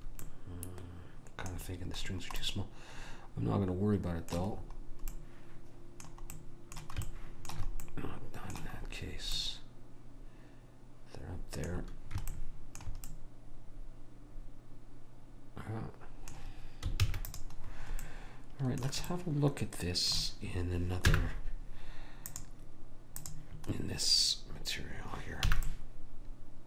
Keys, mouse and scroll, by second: 4.7-8.2 middle drag, 17.2 ctrl+s, 21.2 n, 22.5 click, 25.7 n.